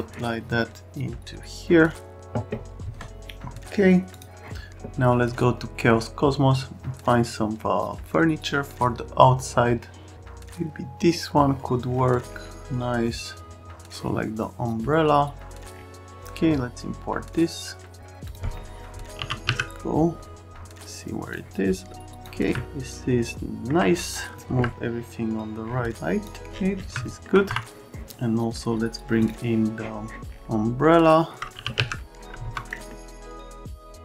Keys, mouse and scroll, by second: 4.1 click, 19.1 r, 19.4 z, 21.3 middle click, 22.5-23.7 alt+right drag, 24.5 F3, 26.2 click, 27.0 alt+middle click, 27.4 F3, 32.4 F3, 32.7 middle click, 33.1 click, 33.4 click, 33.6 right click, 33.7 click.